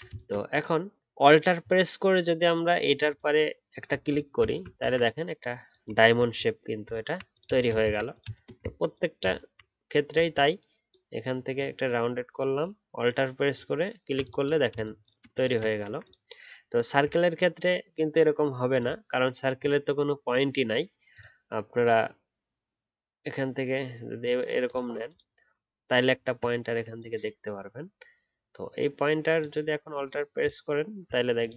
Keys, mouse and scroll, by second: 2.0-3.0 alt+scroll up 1, 3.0 alt+click, 4.4-6.0 alt+scroll down 1, 7.8 ctrl+z, 8.7 alt+scroll up 1, 9.3-11.3 alt+scroll up 1, 13.5 alt+click, 19.7 alt+scroll up 1, 30.3 alt+click.